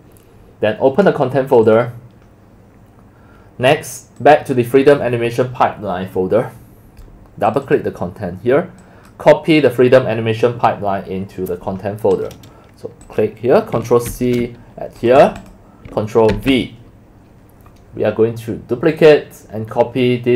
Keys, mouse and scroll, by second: 1.5 click, 1.6 click, 4.2 drag, 5.5 click, 7.5 click, 7.6 click, 8.8 click, 11.8 click, 13.0 click, 14.1 ctrl+c, 14.5 right click, 15.2 click, 15.4 click, 16.3 ctrl+v.